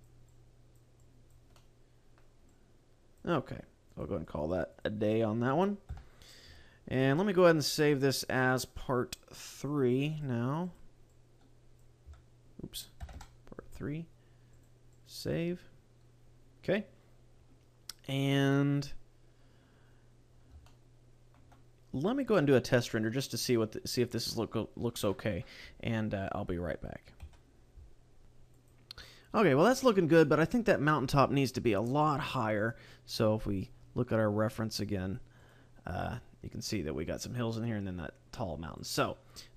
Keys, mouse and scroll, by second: 0.4 click, 1.0 click, 1.6 middle click, 2.5 click, 3.9 click, 5.2-5.6 scroll up 2, 5.9 KP_0, 6.5 a, 7.8 click, 15.4 click, 17.2-18.7 scroll down 1, 19.1-19.6 scroll up 4, 20.2-20.7 scroll down 2, 20.7 shift+middle click.